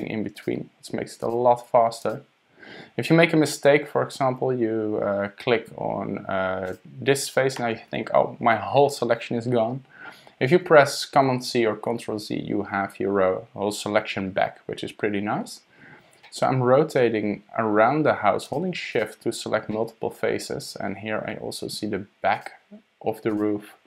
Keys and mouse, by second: 0.3 super+click, 1.2 super+click, 2.0 super+click, 6.7 click, 11.3 super+z, 16.2 click, 16.9 middle click, 18.5 shift+click, 18.9 shift+click, 19.7 click, 19.9 middle click, 22.3 shift+click, 23.3 shift+click.